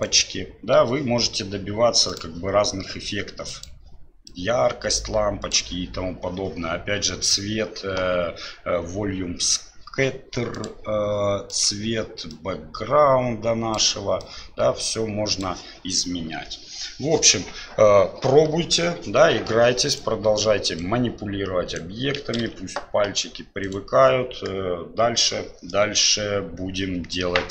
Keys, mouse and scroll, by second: 2.1 click, 3.5 click, 10.5 click, 11.5 click, 19.9 right click, 20.8-21.8 right drag, 22.5 ctrl+z, 23.7 right click.